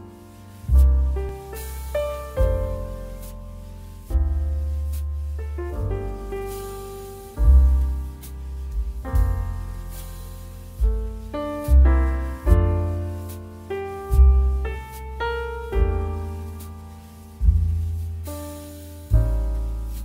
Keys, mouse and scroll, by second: 7.3-8.3 typing, 8.6 Return, 11.6-17.2 drag, 15.4 typing, 18.6 ctrl+t.